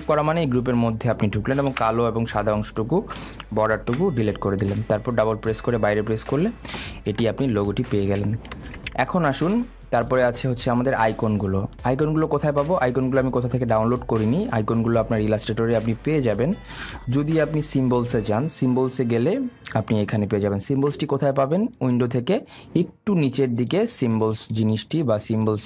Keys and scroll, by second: 2.2 Delete.